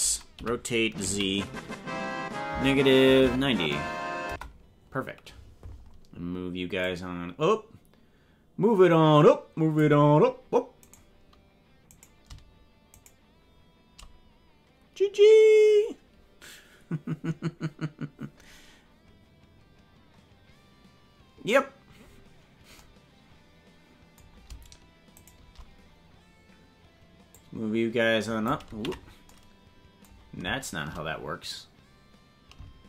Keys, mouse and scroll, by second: 0.3 r, 6.8-9.9 drag, 10.9 right click, 12.0 right click, 13.0 shift+right click, 22.1-22.5 scroll up 3, 25.2 shift+right click, 27.3-28.5 drag, 28.8 ctrl+z.